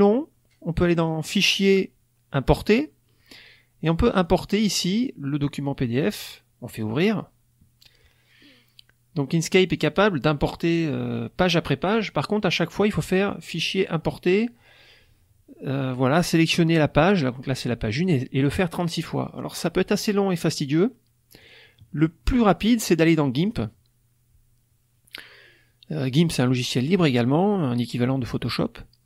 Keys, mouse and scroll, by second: 0.9 click, 2.4 click, 4.1 click, 6.6 click, 21.4 click, 23.3 click.